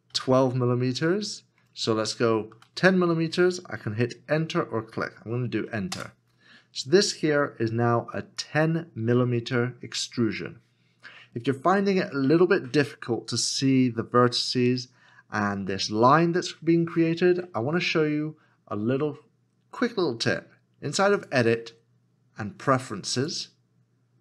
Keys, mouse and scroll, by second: 0.1 2, 1.6 BackSpace, 2.5 0, 5.9 KP_0, 6.5 Return.